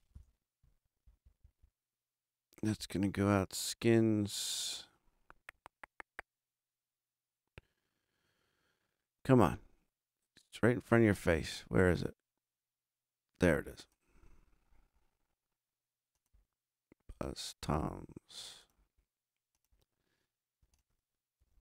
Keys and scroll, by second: 0.0-0.3 typing.